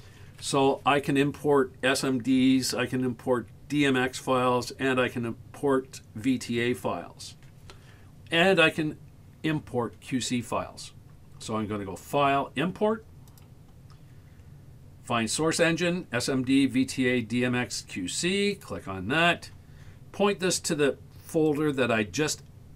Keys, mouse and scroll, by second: 12.0-18.7 drag.